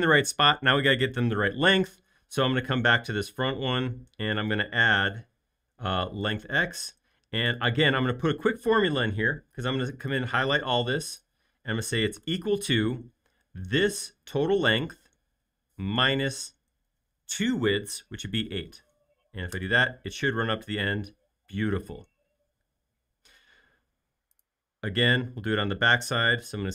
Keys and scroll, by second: 12.4 =, 16.0 -, 17.7-18.4 typing, 19.5 Return.